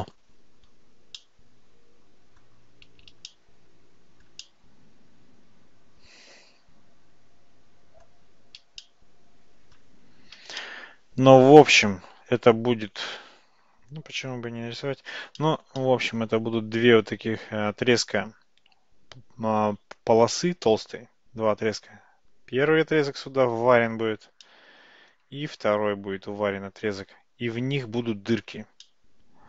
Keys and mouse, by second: 1.3-2.5 middle drag, 3.3-4.3 shift+middle drag, 4.5-8.1 middle drag, 8.9-9.8 shift+middle drag, 10.7-12.2 shift+middle drag, 15.5 shift+middle click, 15.9-16.3 middle drag, 24.5-25.2 middle drag, 28.9-29.4 middle drag.